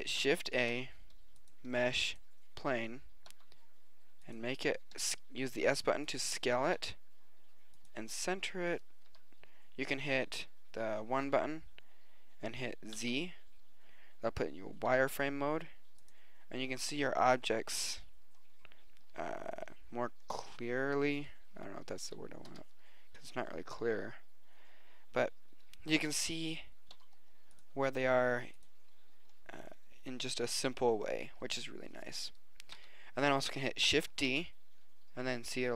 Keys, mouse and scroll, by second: 0.5 shift+a, 2.9 s, 5.1 s, 6.9 g, 9.2 KP_1, 13.0 z, 14.9 g, 22.0 KP_3, 22.5 KP_1, 26.9 g, 28.0 s, 32.8 KP_3, 34.3 shift+d.